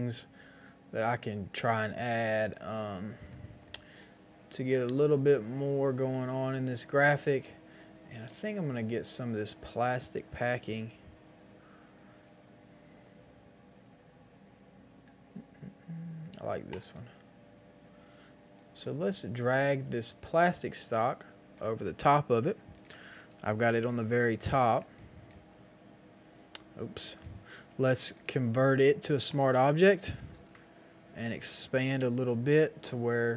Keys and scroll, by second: 23.7 ctrl+shift+x, 30.3 ctrl+t.